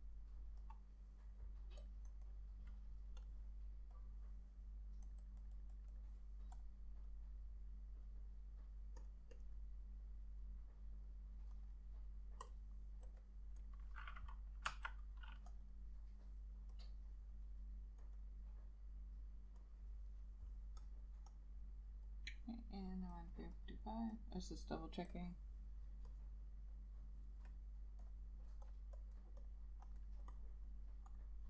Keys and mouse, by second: 2.2 double click, 14.8 F6, 15.8 double click, 21.5 double click.